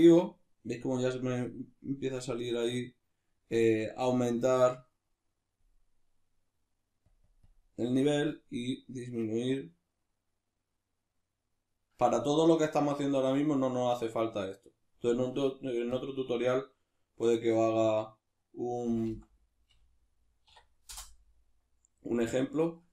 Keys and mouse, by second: 2.3-4.1 middle drag, 4.1-7.9 drag, 15.9-22.6 drag, 22.6-22.9 shift+middle drag.